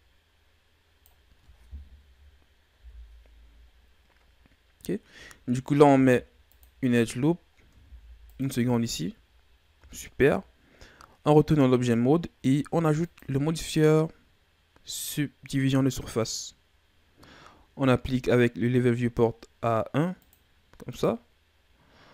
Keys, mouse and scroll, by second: 2.7 KP_1, 5.8 ctrl+r, 7.7 ctrl+r, 9.8 Tab, 12.9-16.0 drag, 20.1-22.1 drag.